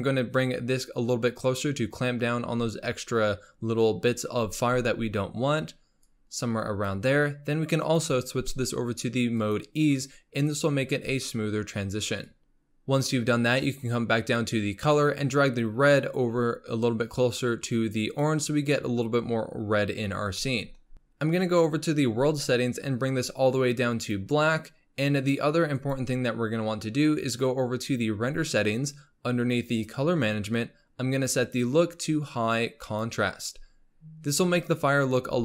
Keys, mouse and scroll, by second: 0.4-3.5 drag, 6.0-10.9 drag, 12.3 click, 12.6-14.0 middle drag, 14.0-15.2 scroll up 3, 15.2-18.7 drag, 19.8-20.4 scroll down 8, 20.4 middle click, 20.8-21.2 scroll up 3, 21.2 click, 22.2 click, 25.8 click, 29.7-30.3 drag, 30.3-30.7 scroll down 2, 31.2-35.4 drag.